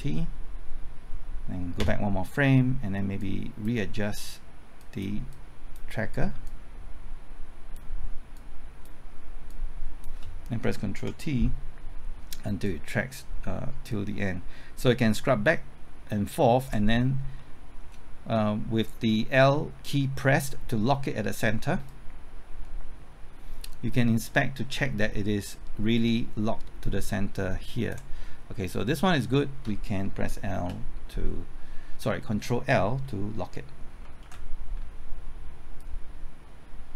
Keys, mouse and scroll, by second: 1.8 Left, 3.2-9.4 drag, 10.9 ctrl+t, 12.6-16.9 drag, 16.9-17.3 scroll up 1, 17.3-18.4 middle drag, 21.8-28.4 drag, 30.6 l, 34.2 ctrl+l, 35.8-36.9 drag.